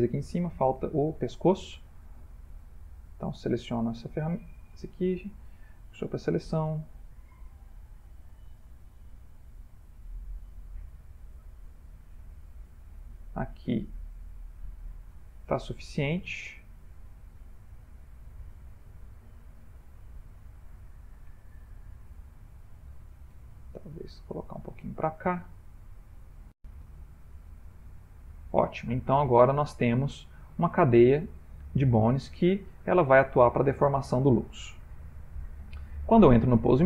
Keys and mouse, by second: 0.3 shift+middle click, 0.9 ctrl+middle click, 1.2 ctrl+middle click, 1.4 shift+middle click, 1.5 middle click, 1.6 shift+middle click, 2.6 Tab, 3.4 click, 4.6 shift+s, 6.6 click, 7.4 Tab, 7.9 click, 9.0 shift+s, 11.7-14.6 shift+middle click, 12.7 click, 13.5 middle click, 13.8 middle click, 14.1 middle click, 14.5 middle click, 18.8 click, 20.1 ctrl+middle click, 20.8 shift+middle click, 21.5 ctrl+middle click, 23.4 g, 27.1 ctrl+middle click, 27.7 ctrl+middle click, 28.0 shift+middle click, 28.1 shift+middle click, 29.0 middle click, 30.4 ctrl+middle click, 31.2 ctrl+middle click, 32.4 middle click, 32.5 shift+middle click, 33.6 Tab, 34.4 middle click, 34.9 middle click.